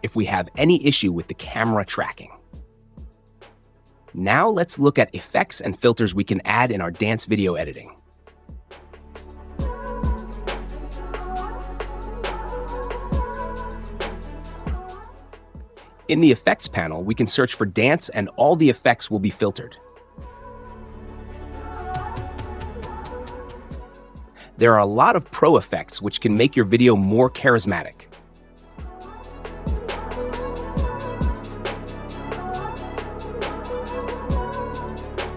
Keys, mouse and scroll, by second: 6.4-7.5 drag, 18.6 click, 19.2-20.5 typing, 28.9-29.9 drag.